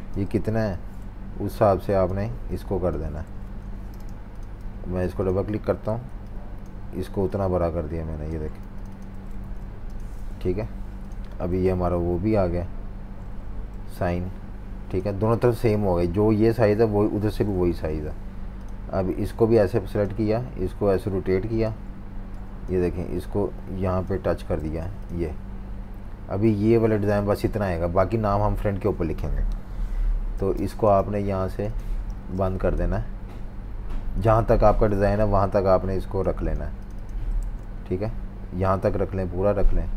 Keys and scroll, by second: 0.4 v, 4.1 alt+super+v, 4.6 v, 5.9 a, 8.6 v, 10.4 Delete, 11.6 Page_Up, 11.9 Page_Up, 12.6 Page_Up, 13.2 Page_Up, 17.5 super+-, 17.6 super+-, 24.6 super+z, 30.4 typing, 32.1-32.8 typing, 36.6 v, 37.4 z, 39.2 v.